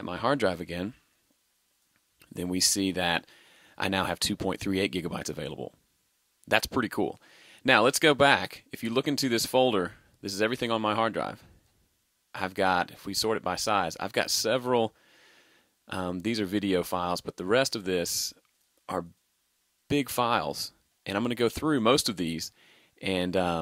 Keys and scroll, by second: 0.4 super+i.